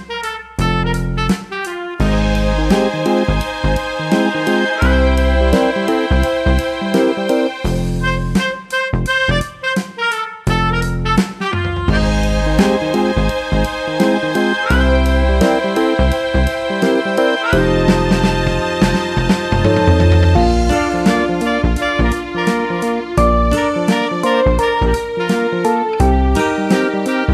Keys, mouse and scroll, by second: 1.3 click, 3.0 shift+click, 8.2 click, 9.8 click, 12.2 click, 16.1 click, 19.7 shift+click, 21.9 F5, 23.0 Escape, 24.2 click.